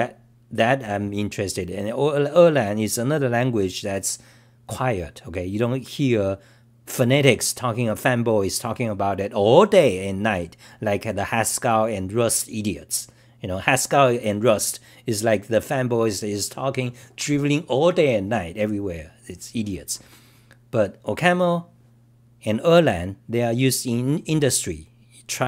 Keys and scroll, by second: 5.9-6.7 typing.